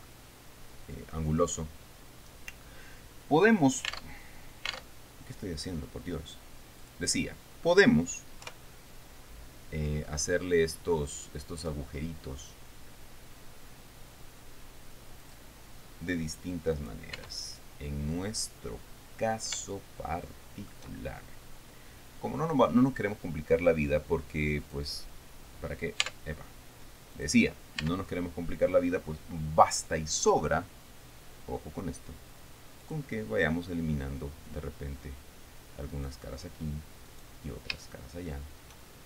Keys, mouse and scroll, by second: 1.9-2.3 scroll up 1, 2.4 scroll down 1, 3.2-3.5 scroll down 1, 4.6 alt+Tab, 5.5 alt+Tab, 7.4 click, 9.0 KP_3, 15.8 click, 17.3 right click, 17.8 Tab, 18.6-19.1 scroll up 2, 19.2 scroll up 2, 19.5-20.0 scroll down 2, 20.2-21.4 shift+middle drag, 21.7-22.2 shift+scroll up 2, 25.2 click, 26.6 Tab, 27.7 click, 28.4 Tab, 29.6-30.0 scroll up 1, 33.4 click, 36.5 right click, 37.6 right click.